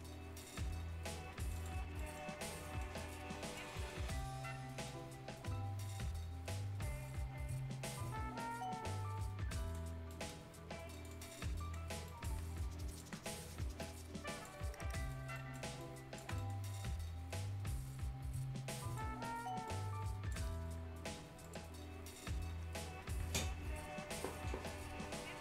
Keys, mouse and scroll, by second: 0.0-0.4 scroll up 1, 0.4 right click, 1.4 click, 1.8 scroll down 1, 1.9 right click, 3.1 click, 3.7 right click, 4.0 scroll up 1, 4.8-9.8 drag, 9.8 scroll up 1, 10.0 right click, 10.4 scroll up 1, 10.9 click, 11.3 scroll down 1, 11.5 right click, 12.5 ctrl+click, 13.2 scroll up 1, 13.9 ctrl+click, 15.1 scroll up 1, 15.3 right click, 15.8 ctrl+click, 16.3 ctrl+right click, 16.6 scroll up 1, 17.6-20.6 drag, 20.6 scroll down 1.